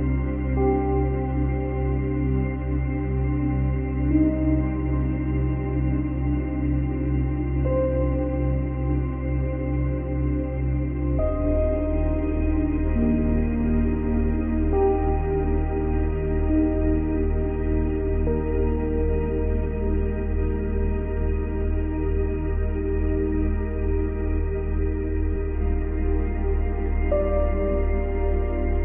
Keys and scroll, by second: 3.2 ctrl+z.